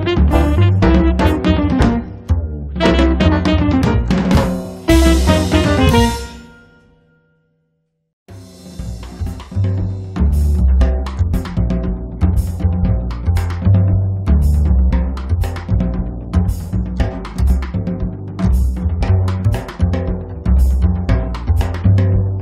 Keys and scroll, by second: 2.4 space, 3.1 Escape, 5.5 space, 8.3 space, 8.8 Escape, 11.2 space, 11.7 Escape, 18.4 space, 18.8 Escape.